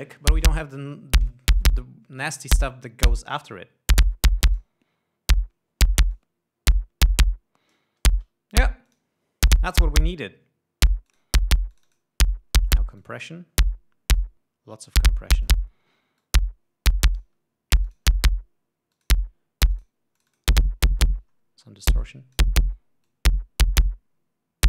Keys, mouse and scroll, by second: 3.3-5.3 drag, 6.7-8.5 drag, 9.4-10.5 drag, 11.6 click, 12.3 click, 13.5 click, 14.7-16.2 drag, 16.8 click, 18.4 click, 19.5 click, 20.3 click, 20.8 click, 22.6 click, 23.6 click.